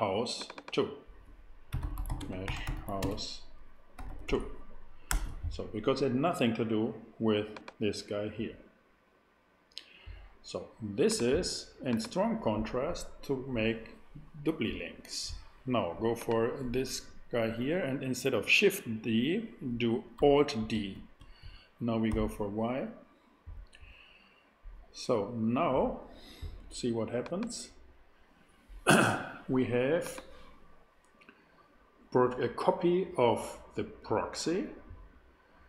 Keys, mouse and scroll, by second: 1.7-4.2 typing, 5.1 Return, 7.5-9.5 drag, 11.0 click, 20.7 alt+d, 22.1 alt+y, 25.5-27.2 middle drag, 33.3-35.6 middle drag.